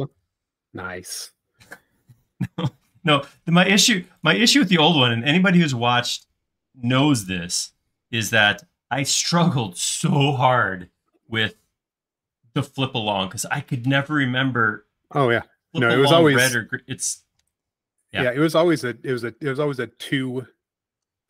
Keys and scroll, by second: 0.1 BackSpace, 6.9 m, 18.4 space.